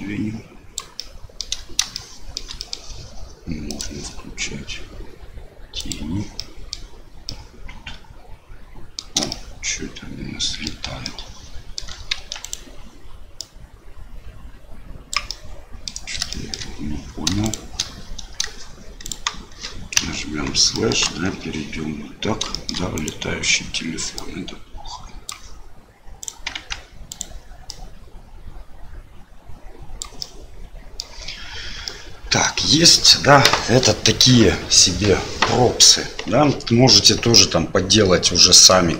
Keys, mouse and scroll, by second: 1.0 middle click, 2.0 shift+middle click, 2.7 middle click, 3.6-6.1 drag, 6.4 middle click, 7.2-9.0 middle drag, 9.3-10.7 shift+middle drag, 11.1 shift+middle click, 12.1 Tab, 12.4 click, 13.4-15.3 drag, 15.4 middle click, 16.4 shift+middle click, 17.4 shift+click, 19.0 shift+click, 20.7 middle click, 21.0 KP_1, 22.5 shift+middle click, 22.9 click, 24.2-25.3 drag, 26.2 click, 26.5 Tab, 27.1 click, 27.7-30.0 drag, 30.3 middle click, 32.0 middle click, 38.3 middle click.